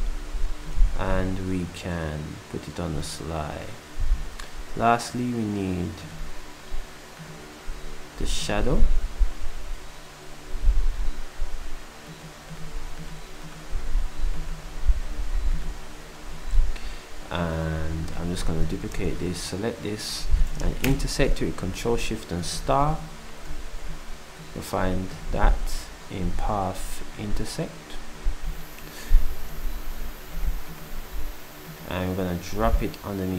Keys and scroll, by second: 0.9 shift+s, 14.6 s, 20.9 8, 21.6 d, 22.6 d.